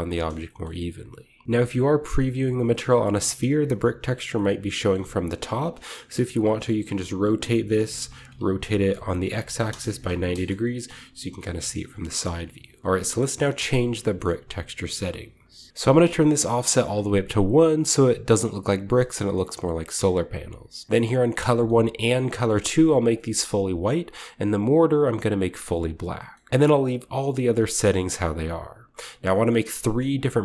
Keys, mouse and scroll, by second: 1.4 a, 3.1-4.3 middle drag, 4.9 middle click, 5.9-7.6 middle drag, 6.3 typing, 7.6 typing, 9.2-10.3 typing, 9.6 Return, 11.4 shift+middle click, 12.3 a, 12.6-14.9 shift+scroll up 1, 12.8-15.7 drag, 14.9 middle click, 14.9-15.7 scroll down 1, 15.7-18.1 middle drag, 16.3-19.8 drag, 19.0-20.3 scroll down 1, 19.2-19.8 shift+middle drag, 20.0-20.9 middle drag, 20.3-20.9 scroll up 1, 20.9-22.8 drag, 21.4 scroll up 1, 22.5-23.5 scroll up 4, 24.1 click, 24.7-25.0 scroll down 1, 26.1-27.4 middle drag, 28.0-29.3 scroll down 2, 29.3 click, 29.7 scroll down 1, 29.9 click, 30.3 click.